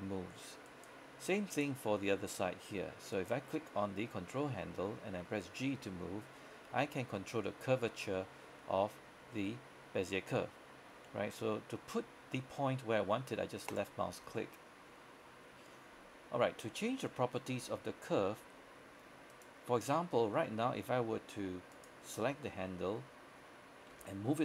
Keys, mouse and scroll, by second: 0.8 right click, 4.1 g, 13.8 click, 18.2-18.7 scroll down 1, 18.7-19.4 scroll up 1, 19.4 right click, 24.0 g.